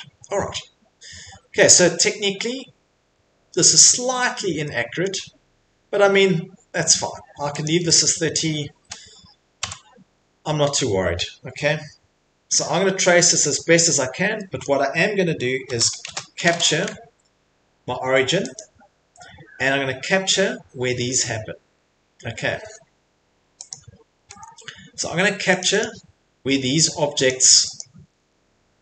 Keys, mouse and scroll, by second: 3.1-3.7 scroll, 3.7 scroll, 5.0 middle click, 7.1 middle click, 7.6 click, 8.0 click, 9.6 Delete, 9.6 scroll, 13.9-14.3 scroll, 14.6 click, 14.9 click, 14.9 click, 15.5-16.9 typing, 18.6 click, 19.6 middle click, 19.7 middle click, 21.8 middle click, 23.7 click, 24.1 Escape, 24.3 Escape, 24.6 middle click, 24.7 middle click, 25.6 click, 25.8 click, 27.2 click, 28.0 Escape, 28.0 click, 28.2 Escape.